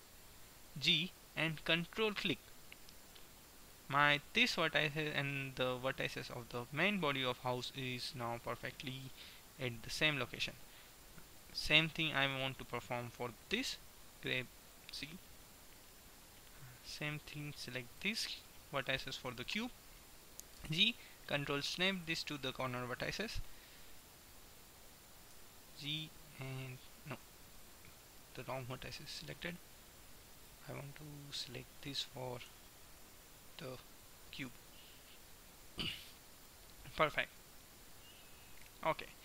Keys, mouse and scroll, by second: 9.1 middle click, 9.9-11.7 right drag, 13.6 g, 15.2 middle click, 16.9-19.9 middle drag, 20.7 g, 22.6-23.9 middle drag, 23.9-25.7 right drag, 25.2 g, 27.7-29.1 middle drag, 29.6-32.1 drag, 32.1 right click, 32.6 g, 34.6 middle click, 37.6 KP_1.